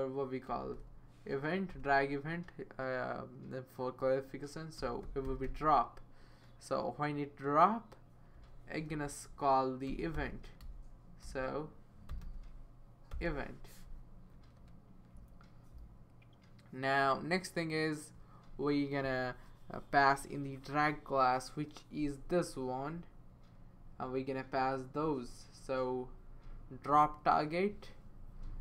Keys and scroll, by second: 0.5 typing, 1.7 Return, 4.5-5.9 typing, 8.9-14.6 typing, 14.1 Right.